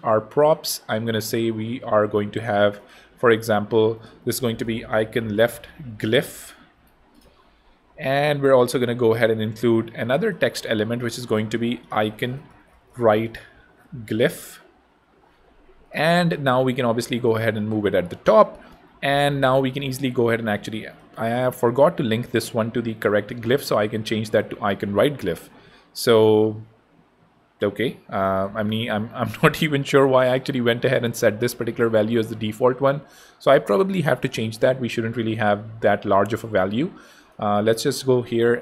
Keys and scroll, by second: 4.5-7.1 typing, 12.0 super+a, 12.3-14.7 typing, 18.2 Escape, 27.6 Escape.